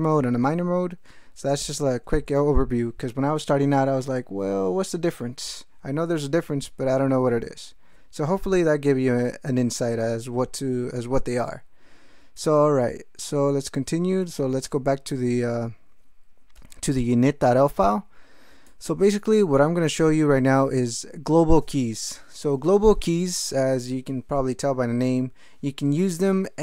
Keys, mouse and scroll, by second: 12.4 ctrl+x, 12.6 ctrl+s, 14.2 ctrl+x, 14.3 ctrl+b, 14.6 ctrl+Return, 18.6 alt+shift+..